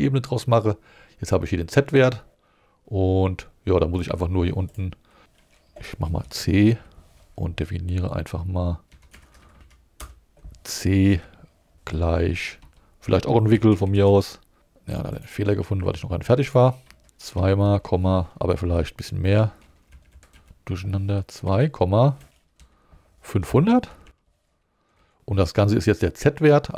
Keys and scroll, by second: 5.2 Left, 6.2 ,, 6.7 c, 8.9 Up, 9.1 Right, 10.0 Return, 11.1-14.5 typing, 15.8 Down, 17.3 2, 17.6 ,, 19.9 Left, 20.2 Delete, 20.3 Left, 21.4 2, 22.6 ,, 23.4 5, 23.9 0, 25.0 Right.